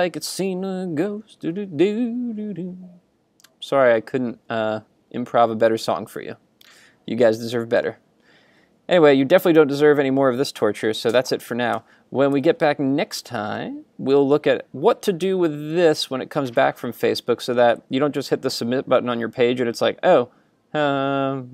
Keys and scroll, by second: 11.8 super+Tab.